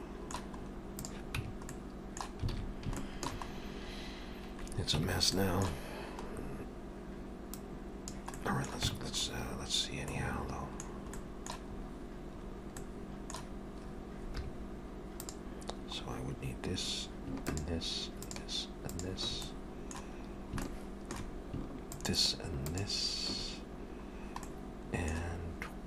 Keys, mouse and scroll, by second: 0.6 scroll up 3, 1.0 click, 1.4 Tab, 1.7 middle click, 2.6 alt+a, 3.0 shift+middle click, 3.5-4.2 scroll up 5, 5.0 Tab, 5.4 middle click, 6.3-6.8 scroll down 2, 7.0 scroll down 1, 7.6 click, 8.4 middle click, 8.9 Tab, 9.3 scroll up 1, 10.1 middle click, 10.1-11.0 scroll up 1, 11.2 middle click, 11.7 scroll up 2, 12.4-12.8 scroll up 2, 12.8 middle click, 14.4 3, 15.2 click, 16.0-16.8 scroll up 1, 16.8-17.4 scroll up 4, 17.4 shift+click, 18.3 shift+click, 19.3 shift+click, 19.5 middle click, 20.4 scroll down 2, 20.7 shift+middle click, 21.9 shift+click, 23.4 shift+click, 24.0-24.5 scroll down 2, 24.5 middle click.